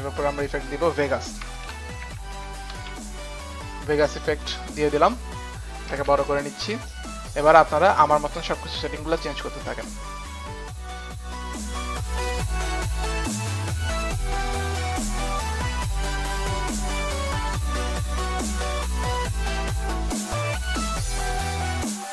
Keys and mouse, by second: 0.4 click, 1.3-6.5 typing, 1.5 click, 2.0 click, 2.3 click, 4.3 click, 6.0 click, 10.6 click, 11.6 click, 12.2 click, 14.8 click, 15.6 click, 16.8 click, 18.1 click, 19.3 Return, 19.3 KP_1.